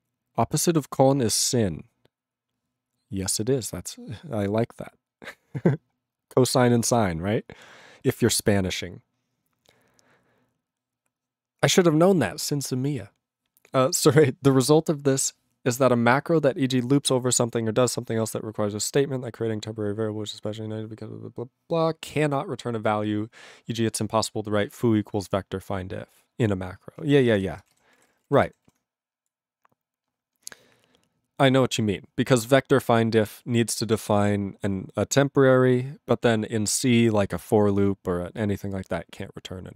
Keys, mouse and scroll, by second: 27.0 ctrl+a, 27.2 ctrl+space, 27.2 ctrl+e, 27.3 ctrl+g, 27.6 ctrl+space, 27.7 ctrl+a, 27.8 ctrl+p, 27.9 ctrl+p, 28.0 ctrl+g, 28.0 ctrl+e, 28.1 ctrl+n, 28.2 ctrl+n, 28.2 ctrl+e, 28.6 ctrl+s, 29.2 ctrl+s.